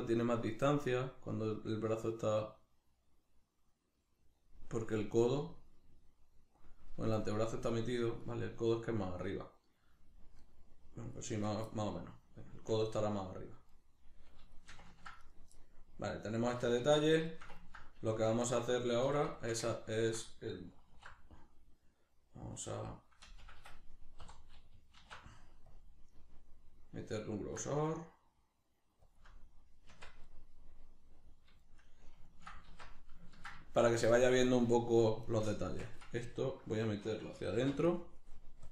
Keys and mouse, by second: 8.2 right click, 9.2 right click, 10.4 right click, 11.2 right click, 11.7-15.2 shift+middle drag, 15.2 right click, 15.6-16.8 middle drag, 16.8 alt+q, 17.3-18.3 ctrl+shift+middle drag, 18.3 Tab, 19.4-20.9 shift+middle drag, 20.9 alt+e, 23.5 Escape, 24.2 3, 25.0 alt+e, 29.2 shift+click, 29.3-35.2 middle drag, 29.9 Tab, 32.7 alt+q, 35.2 right click, 35.6 Tab, 36.4-37.9 ctrl+middle drag, 37.6 shift+c, 37.9-38.7 drag.